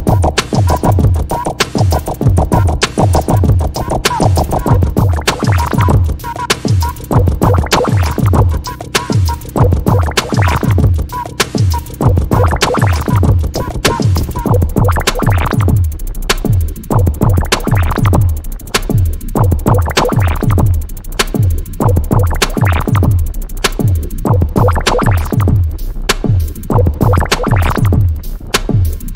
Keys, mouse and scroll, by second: 0.9 scroll up 1, 1.1 click, 1.6-2.1 scroll up 1, 2.1 click, 2.5-3.0 scroll up 1, 3.0-6.3 drag, 6.6 p, 7.0-15.0 drag, 16.5 click, 17.2 alt+click, 20.6 alt+click, 23.4 scroll up 1, 24.0 click, 26.6 p, 27.1-29.1 drag.